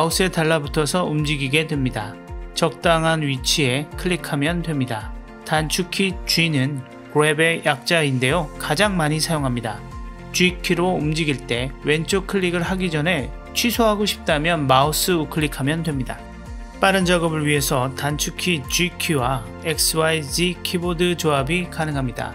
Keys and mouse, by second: 9.6 ctrl+z, 11.2 g, 15.6 click, 17.2 g, 22.1 g.